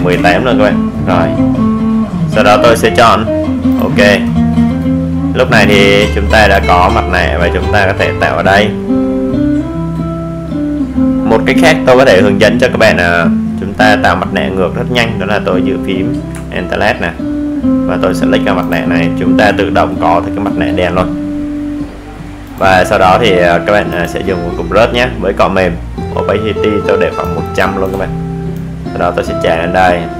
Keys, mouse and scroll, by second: 5.5 alt+click, 9.2 right click, 10.5 click, 12.5-13.8 scroll up 1, 13.8-30.1 drag.